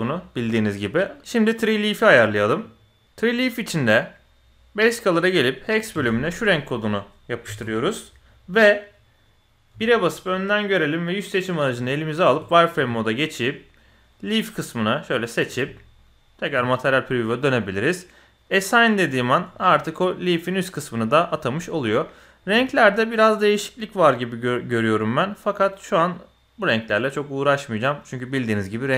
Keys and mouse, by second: 0.9 click, 9.1 click, 9.7 KP_1, 11.1 click, 11.8 z, 12.7 b, 15.6 z, 16.9 middle click, 19.5 Tab, 19.8-20.4 middle drag, 21.6 middle click, 22.2 middle click, 23.5 click, 25.0 drag.